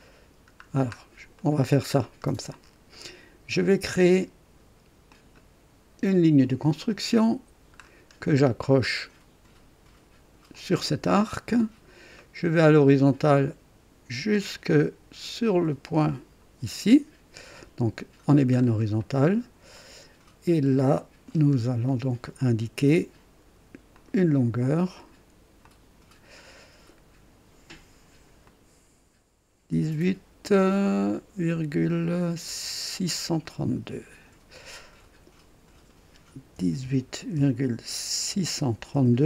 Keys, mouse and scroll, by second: 0.0-0.9 scroll down 2, 1.4 right click, 1.9-2.3 scroll down 1, 5.0 click, 6.8 click, 7.8 scroll up 1, 10.5 click, 11.3-11.8 scroll down 2, 12.2 right click, 16.0 click, 18.6 scroll up 1, 19.0 right click, 19.7 right click, 21.3 scroll up 1, 21.9 right click, 23.9 click, 25.6 click, 28.4 click, 33.4 click, 36.5-38.9 typing.